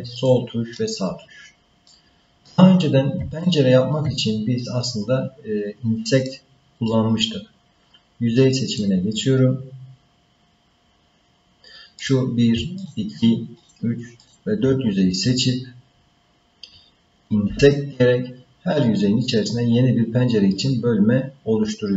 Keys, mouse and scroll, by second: 1.9 middle click, 3.4 shift+middle click, 4.3 scroll down 1, 6.3 middle click, 8.7 click, 12.0 click, 12.8 shift+click, 13.6 shift+click, 14.2 shift+click.